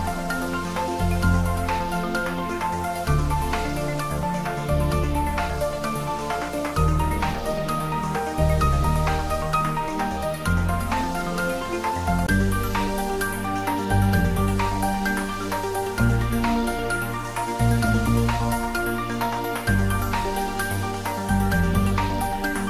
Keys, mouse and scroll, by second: 0.5 click, 1.2 scroll down 1, 1.9-3.3 middle drag, 3.3 shift+z, 4.3-4.8 scroll up 2, 4.8 shift+z, 8.3 scroll up 1, 8.9-10.3 middle drag, 10.3 click, 13.7 s, 14.7 click, 15.3 scroll up 1, 16.5 g, 16.9 z, 19.1 click, 20.1 shift+z, 20.9 click, 21.6 shift+z, 22.1-22.5 scroll down 1, 22.5-22.6 middle drag.